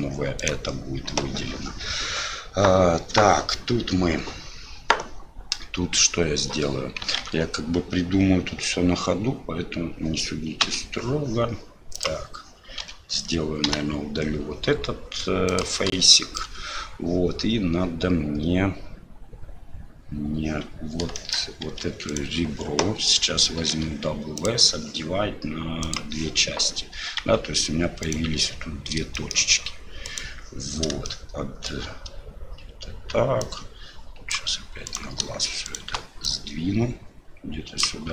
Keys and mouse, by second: 7.2 alt+a, 11.9 click, 12.8 l, 13.7 Delete, 16.1 shift+click, 21.1 shift+click, 21.6 2, 22.1 click, 23.7 w, 25.8 click, 27.2 1, 28.0 right click, 29.2 shift+click, 30.0 right click, 31.0 shift+click, 33.4 click, 34.8 right click, 35.6 shift+right click, 36.3-37.8 drag.